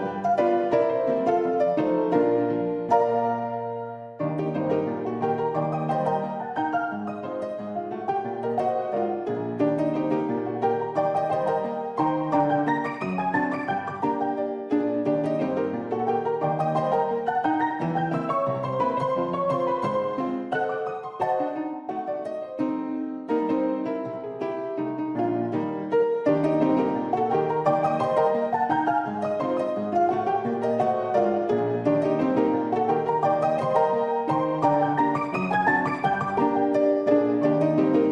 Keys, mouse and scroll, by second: 0.3 `, 0.3 s, 4.5 g, 8.0 middle click, 9.3 shift+click, 10.2 middle click, 11.6 s, 19.1 shift+click, 21.4 ctrl+r, 25.4 ctrl+r, 29.1 ctrl+r, 32.3 ctrl+r, 34.5 shift+click, 36.8 shift+click, 37.3 click.